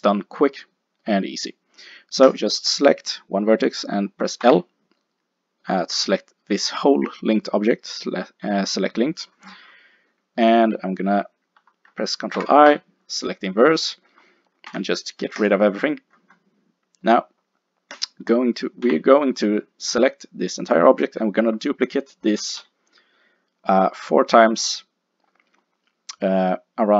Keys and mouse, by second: 2.3 click, 4.5 l, 9.3-14.0 middle drag, 12.4 ctrl+i, 14.7 x, 18.0-19.7 drag, 18.9 l, 19.7 middle click, 22.4 KP_7, 22.6 KP_5, 26.3-26.9 middle drag.